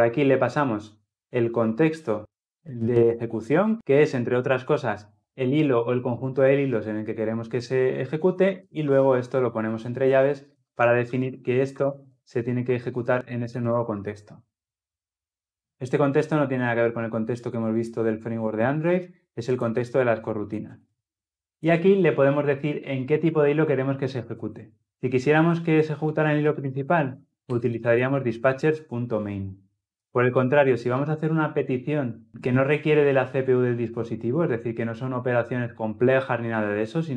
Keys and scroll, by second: 13.3 ctrl+alt+l, 13.5 ctrl+alt+o, 27.5 Return.